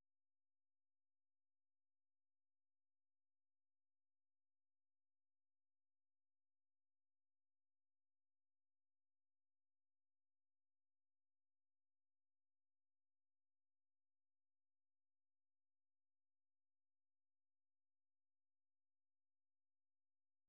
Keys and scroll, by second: 2.2-3.5 typing, 9.6 2, 10.7 super+1, 14.0 Up, 14.6 Return, 15.7 ctrl+x, 15.9-20.4 typing.